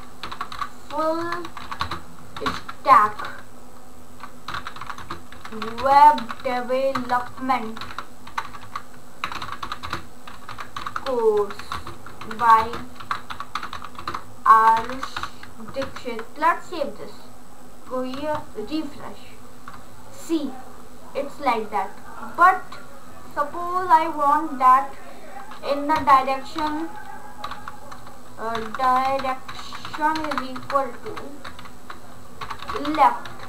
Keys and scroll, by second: 0.0-10.1 typing, 12.6-15.6 typing, 15.8 ctrl+s, 26.3 space, 26.4 d, 27.8-31.0 typing, 32.2-33.4 typing.